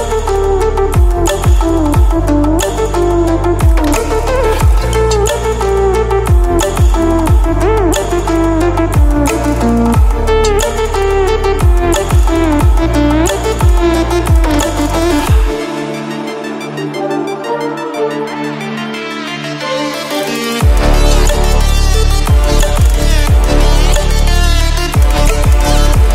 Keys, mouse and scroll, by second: 0.6 alt+scroll up 2, 4.1 r, 4.3 click, 5.4-6.2 alt+scroll down 3, 6.5 alt+scroll down 1, 7.5 ctrl+scroll down 1, 8.1 alt+scroll up 1, 9.6-15.9 alt+drag, 10.6 alt+click, 12.7-13.6 alt+scroll up 1, 13.6-15.4 alt+scroll down 1, 16.9 ctrl+d, 21.3 alt+scroll down 1, 21.9 scroll up 1, 23.6 v, 24.9-25.9 drag.